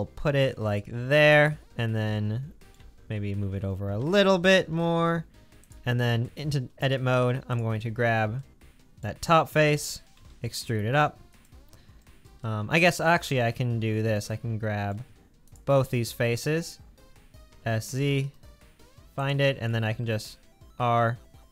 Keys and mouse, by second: 4.0 g, 6.2 Tab, 9.7 g, 17.5 s, 20.0 ctrl+r.